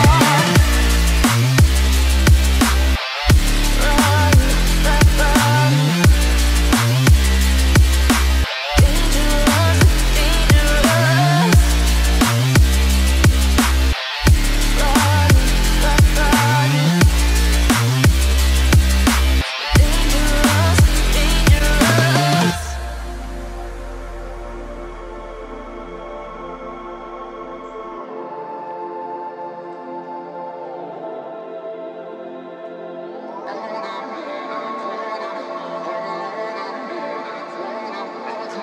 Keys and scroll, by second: 13.9 g, 27.3 Return.